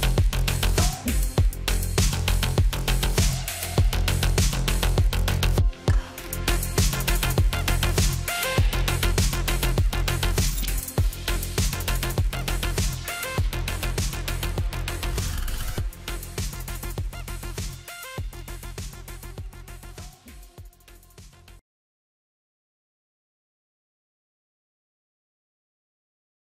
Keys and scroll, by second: 2.7 ctrl+z.